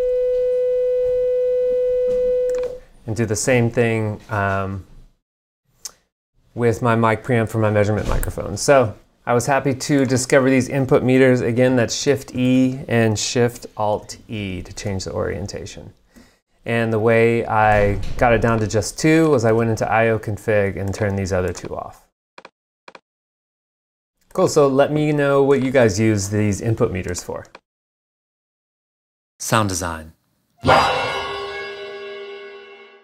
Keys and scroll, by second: 11.9 alt+shift+e, 19.6 alt+a.